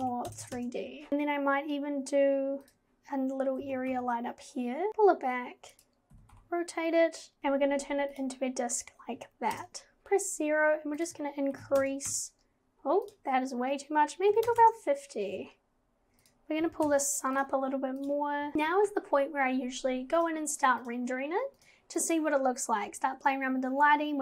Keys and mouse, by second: 0.4 KP_0, 1.1 KP_0, 1.1 shift+a, 3.6 g, 4.9 g, 6.1 g, 7.4 click, 9.5 KP_0, 11.0-12.1 drag, 13.1-14.6 drag, 16.6 g, 18.0 click, 20.3 click, 21.6 click.